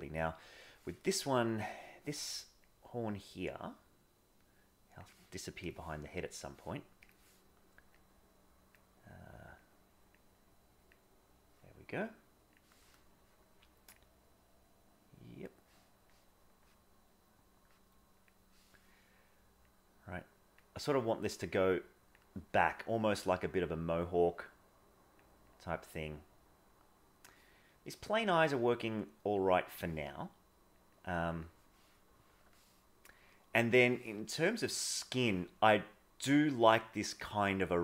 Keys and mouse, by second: 2.7-5.0 drag, 7.0 click, 8.0 click, 9.4 click, 10.4 click, 19.6 click, 20.9 click, 21.5 click, 24.0-25.2 drag, 26.0-27.2 drag, 28.7 click, 29.4 click, 30.8 click, 31.0 click, 32.5-33.8 middle drag, 34.1-35.2 middle drag.